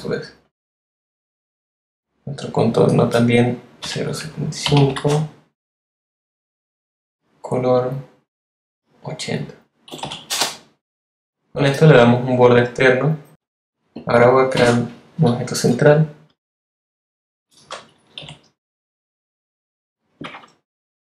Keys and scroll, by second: 3.8-5.4 typing, 9.8 8, 10.2 Return, 14.5 |, 18.1 shift+v, 18.7 v.